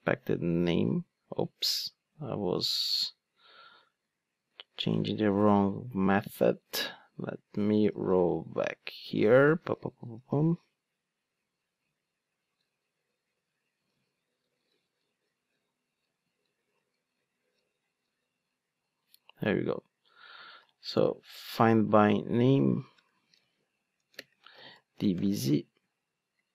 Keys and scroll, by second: 3.7 super+z, 7.0 super+z, 7.9 super+z, 8.4 super+z, 9.0 super+z, 9.5 super+z, 10.3 super+z, 12.4 super+z, 13.3 super+z, 13.9 super+z, 16.4 super+z, 17.5 super+z, 21.5 Return.